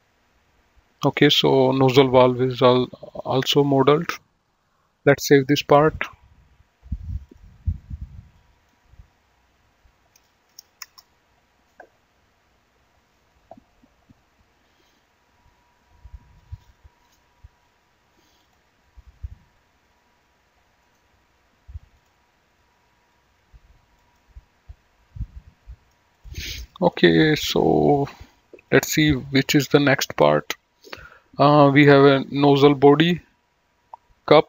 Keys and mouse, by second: 0.0 middle click, 3.3 click, 5.4 click, 7.5 click, 8.6 click, 10.8 BackSpace, 11.2 Return, 16.7 click, 18.7 click, 21.1 right click, 22.1 click, 24.3 middle click, 26.4 click, 27.2 middle click, 28.9 click.